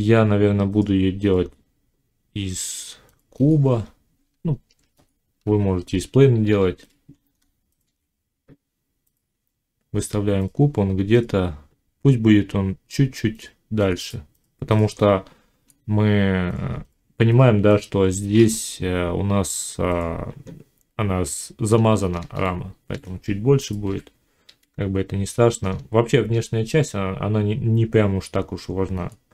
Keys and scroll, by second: 4.2 Tab, 6.5 z, 23.7 g.